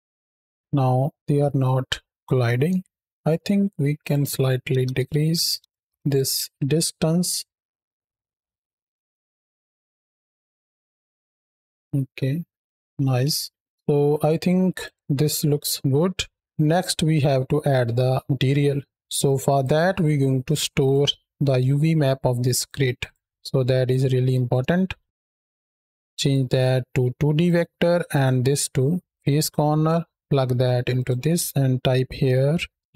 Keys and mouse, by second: 0.1 space, 0.3 shift+Right, 0.9-1.8 drag, 1.8-2.1 middle drag, 2.6-3.1 shift+middle drag, 3.8-5.5 drag, 5.8 shift+Right, 5.8 shift+Left, 6.2 space, 6.8-7.4 drag, 7.8 click, 11.2 space, 11.7-12.3 drag, 12.6 click, 13.1 space, 13.4 space, 13.6 KP_7, 14.6 click, 15.8 middle click, 16.6 middle click, 18.5-19.0 middle drag, 19.4-20.7 drag, 21.3-22.5 drag, 23.1 click, 24.2 shift+a, 26.1-27.3 drag, 27.9-29.1 drag, 29.7-30.1 drag, 30.8-32.9 drag.